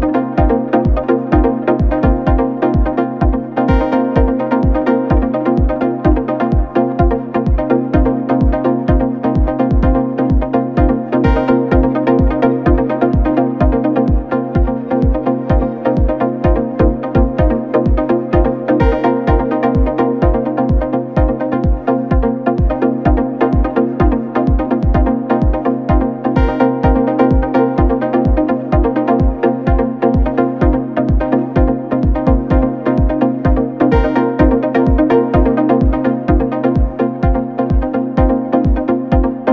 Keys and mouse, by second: 1.8-2.2 shift+middle drag, 2.9-3.2 shift+middle drag, 3.6-4.0 middle drag, 4.3-5.1 ctrl+middle drag, 5.3 shift+middle click, 6.1-6.8 middle drag, 7.6 Tab, 7.8 3, 8.1 click, 9.0 g, 11.7-15.0 middle drag, 17.0 Tab, 17.2 click, 19.0 shift+d, 20.5 s, 24.4 g, 25.7 Tab, 26.1 2, 26.4 click, 27.3 s, 29.5 3, 30.0 click, 30.7 ctrl+click, 31.1 click, 32.5 Tab, 32.8 click, 33.3 Tab, 34.3 s, 37.3 2, 37.6 click, 38.3 ctrl+r, 39.0 s.